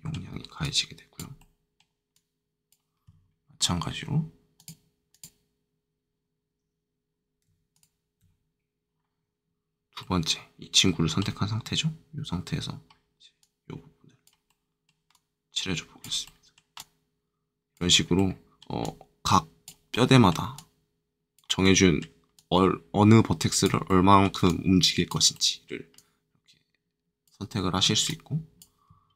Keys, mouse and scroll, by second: 0.6 click, 1.3 middle click, 2.1 click, 4.5 click, 7.7 ctrl+click, 9.9 middle click, 12.0-13.3 middle drag, 13.3-14.4 drag, 14.4 middle click, 15.1 click, 16.2 middle click, 16.7-18.1 drag, 18.1 middle click, 18.8-19.9 drag, 19.9 middle click, 20.5-21.6 drag, 21.6 middle click, 22.3 click, 23.8 middle click, 24.4 click, 25.3 middle click, 25.9 click, 27.4 middle click, 28.0 click.